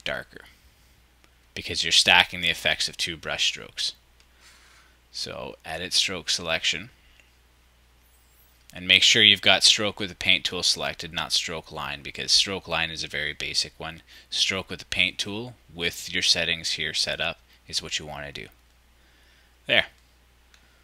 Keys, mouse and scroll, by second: 20.5 click.